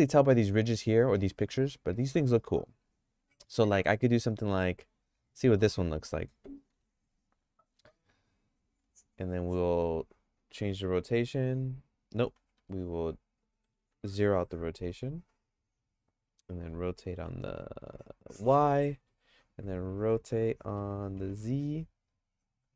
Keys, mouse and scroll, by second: 6.7 g, 10.5 r, 13.8 alt+r, 16.6 r, 20.7 r.